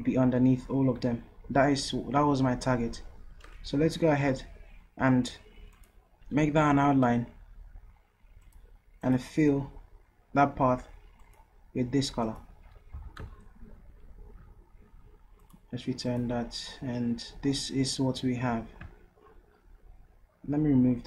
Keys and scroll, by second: 13.0 v.